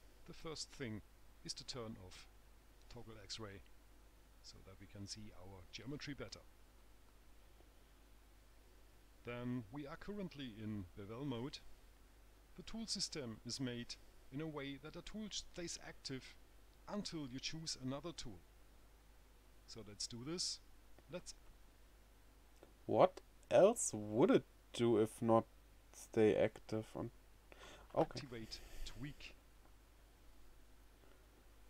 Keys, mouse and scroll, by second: 4.2 click, 29.2 click.